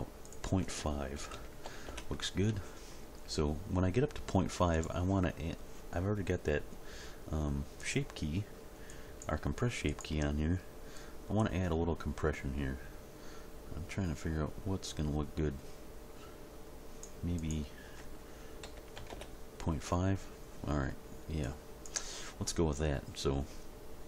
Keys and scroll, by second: 1.3 ., 1.6 5, 1.9 Return, 19.0 5, 19.1 Return.